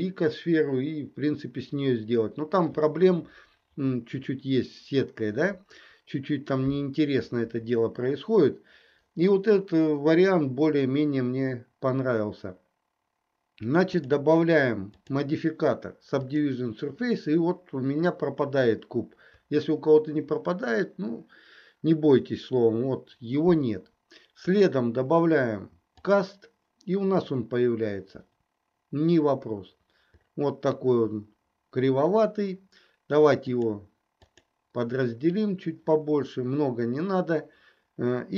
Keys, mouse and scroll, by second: 14.0 click, 15.0-16.5 drag, 24.4-26.2 drag, 33.4 click, 34.3 click.